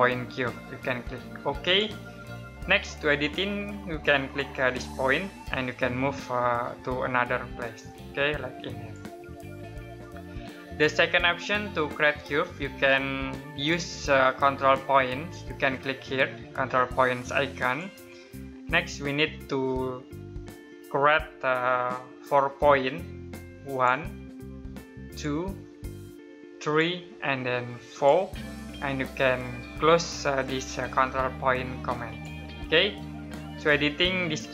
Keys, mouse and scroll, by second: 1.4 click, 4.8 click, 13.3 click, 17.4 click, 18.7 middle click, 23.5 click, 31.8 click.